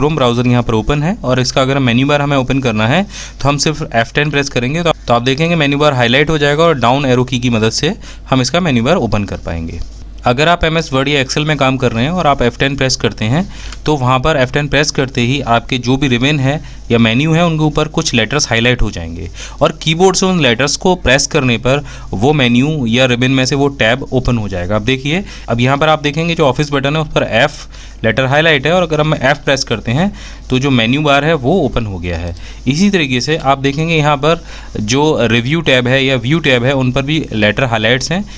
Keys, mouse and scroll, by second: 0.1 F1, 0.3 F10, 6.7-7.5 typing, 9.4 f, 9.8 F1, 23.6 f, 24.0 F1, 24.4 F10, 37.8 f.